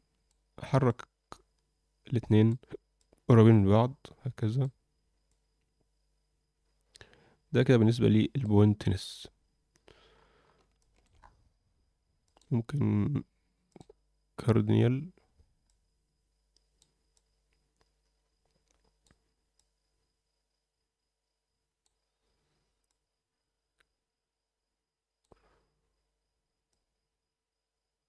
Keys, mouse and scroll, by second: 0.8-2.4 drag, 2.9 click, 5.2 click, 10.1-10.5 scroll up 3, 10.7 alt+shift+middle click, 11.2-12.2 scroll up 2, 12.2-13.9 drag, 15.6-16.7 drag, 17.1-18.9 drag, 19.5-21.8 drag, 22.8-25.2 drag, 25.4-25.8 scroll down 2, 26.7 click.